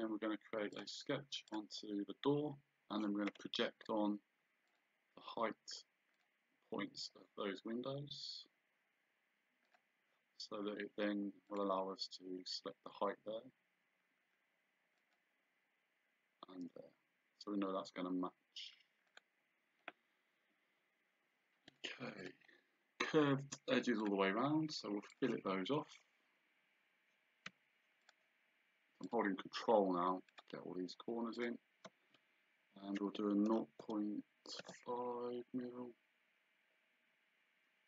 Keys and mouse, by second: 0.8 click, 4.7 click, 6.2 click, 9.7 click, 11.5 click, 15.0 click, 19.1 click, 21.7 click, 24.0 click, 25.1 click, 28.1 ctrl+click, 30.3 ctrl+click, 31.4 ctrl+click, 33.5 KP_0.